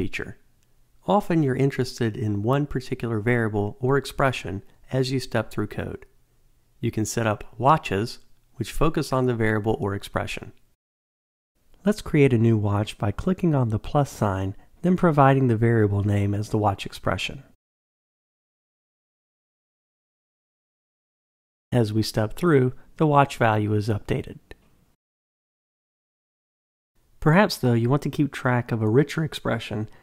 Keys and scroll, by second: 17.2 Return, 22.0 F8.